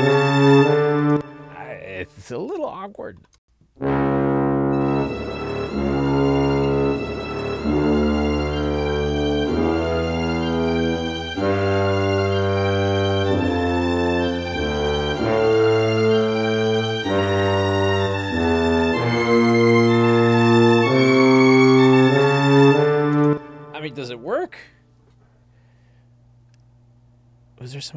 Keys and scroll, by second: 1.1 space, 3.5 space, 23.2 space.